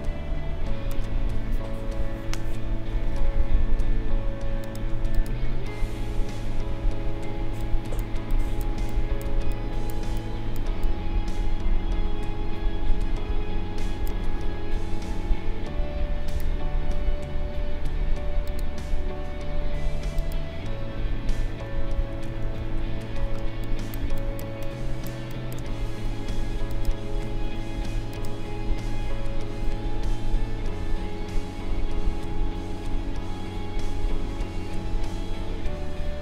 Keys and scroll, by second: 7.4 space, 22.3 ctrl+=, 23.4 space.